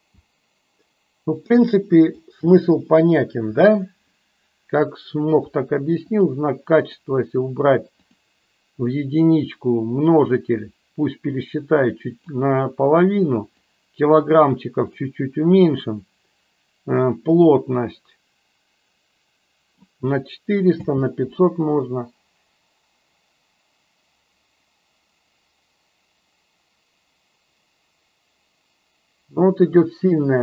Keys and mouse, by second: 0.1 space, 2.1 click, 6.8 click, 8.0 click, 10.3-12.2 drag, 13.4-15.0 drag, 17.4-19.8 drag, 20.8 space.